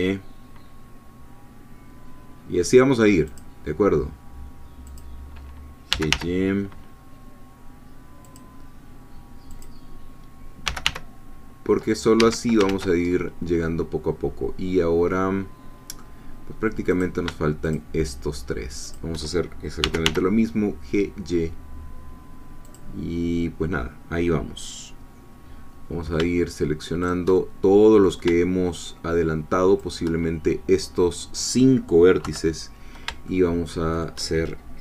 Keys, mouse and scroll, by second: 3.3 click, 5.0 click, 5.9 g, 6.1 y, 8.2 click, 9.6 click, 10.6 g, 10.8 y, 12.2 Escape, 12.7 ctrl+z, 13.1-16.2 ctrl+middle drag, 17.0 click, 17.6 shift+click, 18.9 shift+click, 19.8 g, 20.0 y, 22.6-24.1 drag, 24.1 scroll down 1, 27.1 shift+click, 27.4 shift+middle click, 29.9 shift+click, 32.2 3, 33.3-34.6 shift+middle drag.